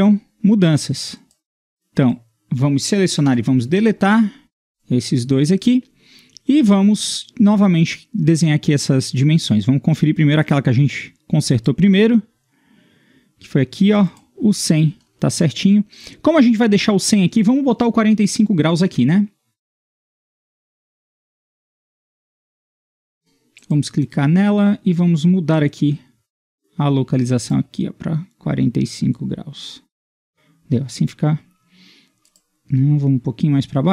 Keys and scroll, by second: 3.3 Delete, 4.7 Delete, 23.1 Escape.